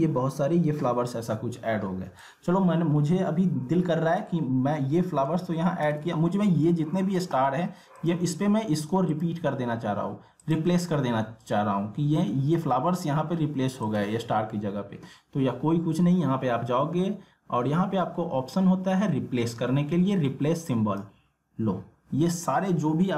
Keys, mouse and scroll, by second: 2.2-5.3 drag, 5.3 ctrl+z, 8.0 click, 13.8 click, 20.7 click.